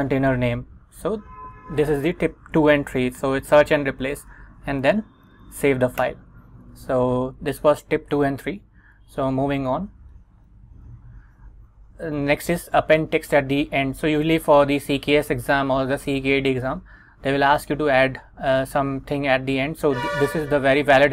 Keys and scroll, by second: 0.0-0.1 typing, 1.5 Escape, 4.9 shift+;, 5.4 x, 6.1 Return, 9.1 super+Tab, 10.2 Return, 11.0 Right.